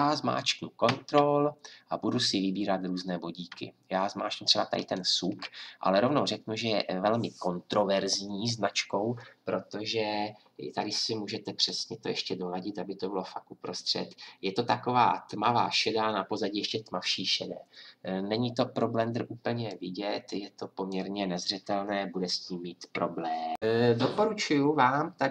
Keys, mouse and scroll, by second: 4.8-8.9 drag, 11.7-19.7 drag, 23.6 F10.